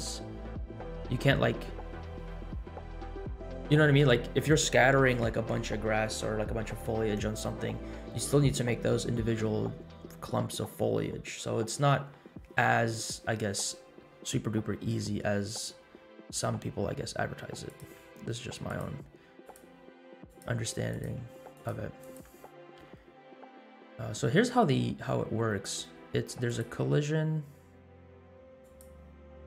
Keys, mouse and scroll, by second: 15.4 x, 17.6 click, 19.3 click, 20.3 click, 21.0 ctrl+click, 21.6 ctrl+click, 22.5 click, 23.0 x, 26.4 click, 28.6 click.